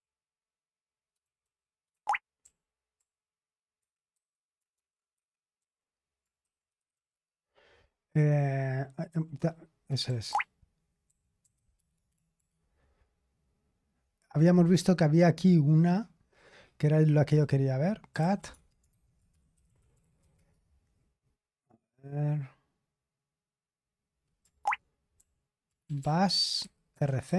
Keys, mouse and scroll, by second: 0.0-2.9 typing, 1.9 Escape, 3.7 Escape, 4.9-5.6 typing, 6.7 Escape, 7.8-12.8 typing, 15.1-16.3 scroll up 1, 16.3-16.9 scroll down 2, 17.8-21.3 typing, 24.7 ctrl+o, 25.1 ctrl+p, 25.6-27.3 typing.